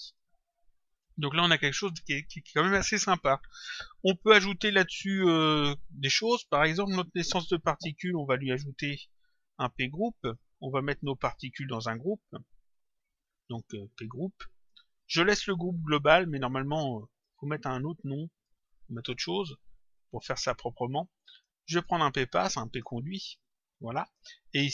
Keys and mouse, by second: 0.0 click, 11.7 click, 13.8 click, 15.8 click, 17.9 click, 21.2 click, 23.4 click.